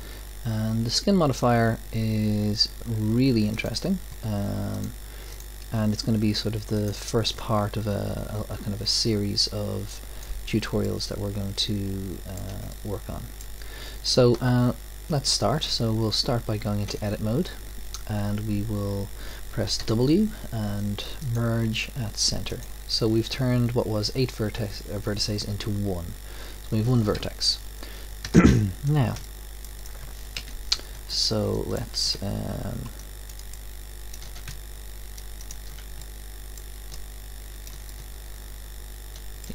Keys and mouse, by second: 9.4-11.1 drag, 10.8-17.1 middle drag, 17.1 Tab, 19.8 w, 27.2 KP_1, 28.2 KP_5, 30.4 KP_1, 33.2 alt+click, 34.7 right click.